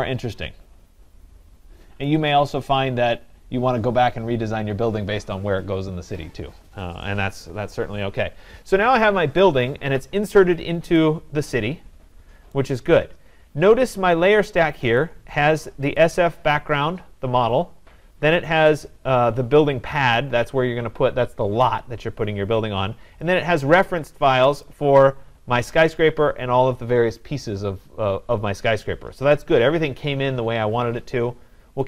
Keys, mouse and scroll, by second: 2.2-7.1 right drag, 12.5 right click, 13.6 Escape, 15.0 click, 16.0 click, 18.8 click, 23.4 click, 24.7 click.